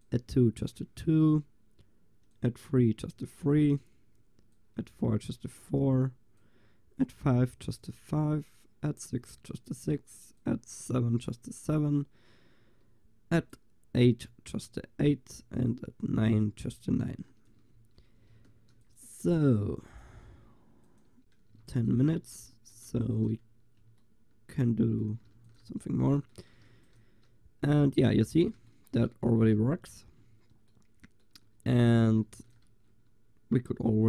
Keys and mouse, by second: 12.2-15.7 drag, 17.8 shift+z, 18.5 ctrl+s, 21.6 ctrl+s, 22.5 click, 23.1 ctrl+s, 23.6-24.3 drag, 25.4 ctrl+s, 26.7 ctrl+s, 29.3 ctrl+s, 32.3 ctrl+s.